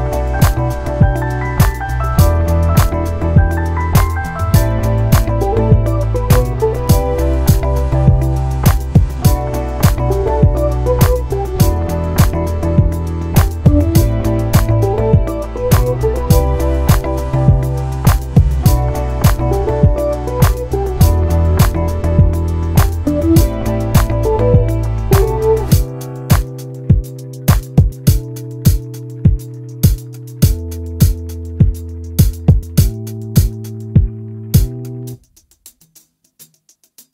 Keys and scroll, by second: 3.2 ctrl+c, 4.6 ctrl+shift+v, 35.0 shift+\.